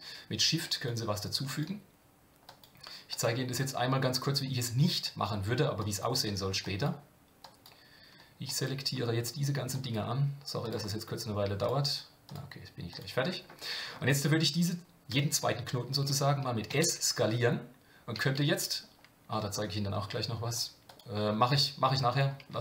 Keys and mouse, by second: 0.8 shift+click, 1.6 shift+click, 2.5 shift+click, 3.2-4.4 shift+drag, 5.0 shift+click, 5.8 shift+click, 6.7 shift+click, 7.4 shift+click, 8.4 shift+click, 9.8 shift+click, 10.6 shift+click, 11.6 shift+click, 12.9 shift+click, 20.9-22.2 drag.